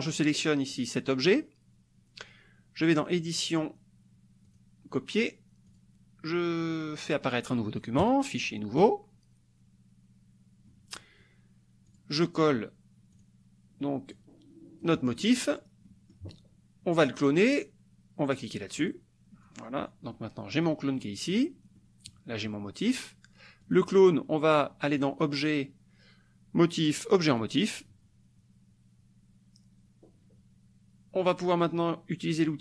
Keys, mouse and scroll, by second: 4.5 click, 5.7 click, 8.1 click, 8.9 click, 10.7-12.2 drag, 13.3 click, 14.1-15.7 drag, 15.9 click, 18.9 click, 19.5-20.8 drag, 21.0 click, 21.8 click, 23.7 click, 24.9 click, 27.3 click.